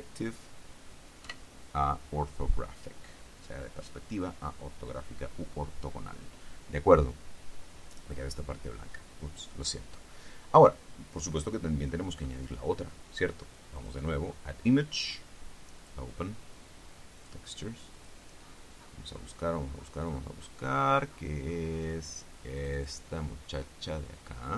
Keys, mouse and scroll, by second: 1.4 KP_5, 11.2-11.6 scroll down 2, 12.0-12.4 scroll up 2, 13.9 click, 14.4-14.7 scroll down 2, 16.0 click, 17.3 click, 18.1 click, 18.6-22.5 scroll down 5, 22.8 click.